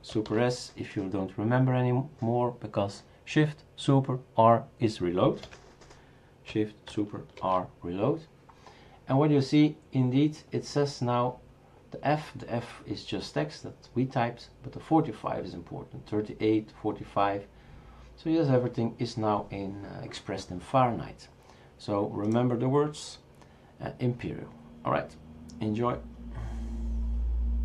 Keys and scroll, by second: 0.2 super+s, 7.4 shift+super+r, 7.8 shift+super+r.